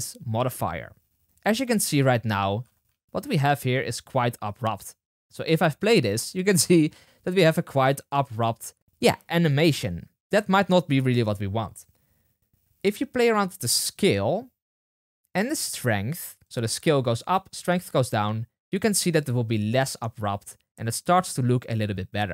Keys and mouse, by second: 5.8 space, 8.6 space, 8.9 space, 10.3 space, 13.8-22.3 drag, 19.2 space, 22.1 space.